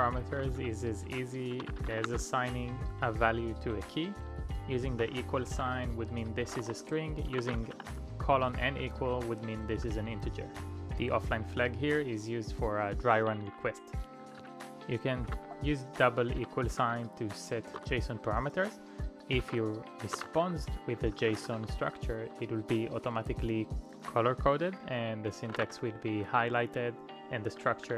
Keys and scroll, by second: 0.3-2.4 typing, 4.7-10.7 typing, 11.3 Return, 13.7-15.2 typing, 16.4-22.8 typing, 25.7-27.1 typing.